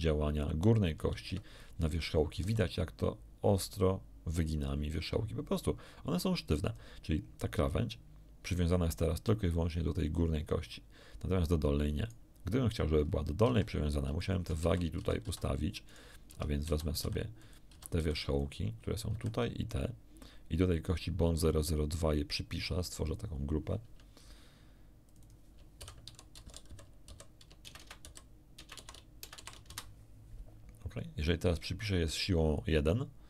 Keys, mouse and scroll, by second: 1.2 Escape, 1.5 scroll up 1, 2.4 r, 6.6 click, 12.0 right click, 12.9-13.2 scroll down 1, 13.4 a, 14.2 shift+middle click, 14.6 shift+z, 14.9 a, 15.2 a, 15.8 shift+middle click, 16.2 Tab, 16.6 a, 17.0 b, 17.4 shift+click, 17.7 a, 17.9 b, 18.1 shift+click, 19.1 b, 19.2 click, 23.0 click, 25.0 click, 25.8-29.6 typing, 29.6 Return, 32.2 click.